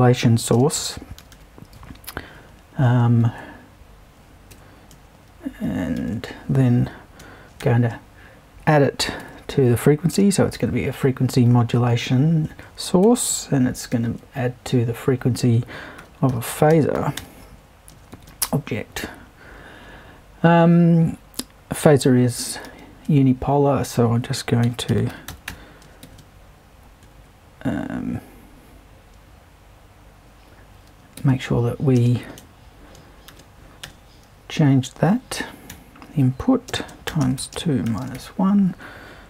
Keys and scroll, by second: 0.5 space, 0.7 2, 1.2 0, 3.2 super+`, 4.5 BackSpace, 6.0 super+i, 7.6 shift+=, 9.2 shift+`, 10.1 shift+space, 10.5 5, 11.9 super+`, 13.0 BackSpace, 13.9 super+i, 15.7-18.6 typing, 22.6 super+i, 24.4-27.0 typing, 31.2-34.4 typing, 35.7-38.6 typing.